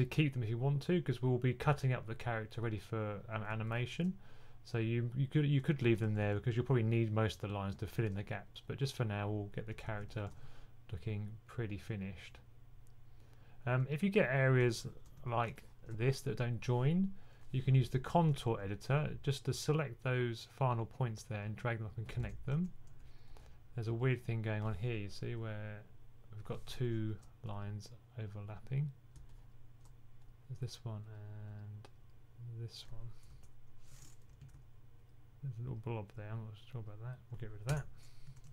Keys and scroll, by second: 5.5-6.2 typing, 9.4-10.3 typing, 13.2 typing, 14.8-15.6 typing, 17.7-18.3 typing, 21.9-22.8 typing, 34.3 super+z, 38.2-38.5 typing.